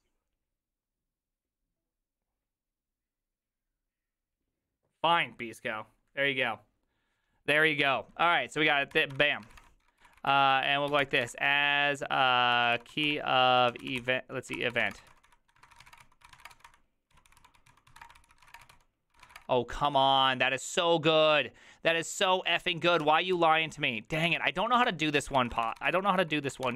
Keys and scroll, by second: 9.1-20.3 typing, 23.9-26.7 typing.